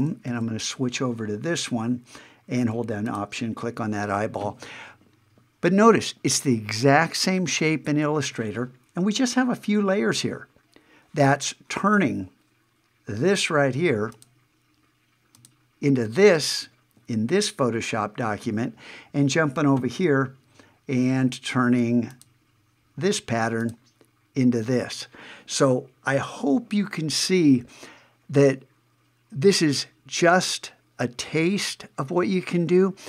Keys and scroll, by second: 0.3 super+`, 18.4 super+`.